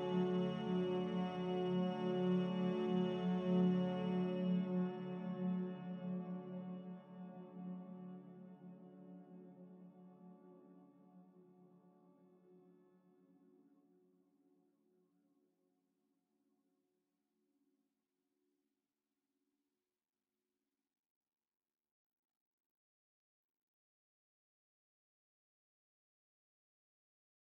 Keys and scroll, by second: 1.4 c, 2.3 z, 16.0 z, 19.1 5, 19.4 Return, 20.8 5, 23.6-25.5 typing, 24.5 Return.